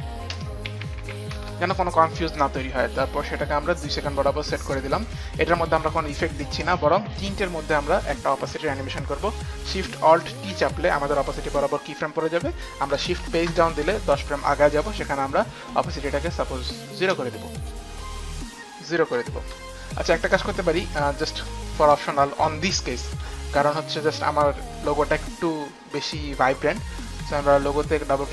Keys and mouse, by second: 0.0-1.9 typing, 3.7 click, 7.4 click, 9.8 alt+shift+click, 10.6 alt+shift+t, 10.6 alt+shift+click, 13.4 alt+shift+t, 13.4 shift+Page_Down, 13.7 alt+shift+t, 13.7 shift+Page_Down, 15.3 shift+Page_Down, 15.3 click, 17.6 shift+Page_Down, 17.7 click, 18.6 click, 19.4 KP_0, 19.6 Return, 20.2 click, 21.3 click, 23.7 Return.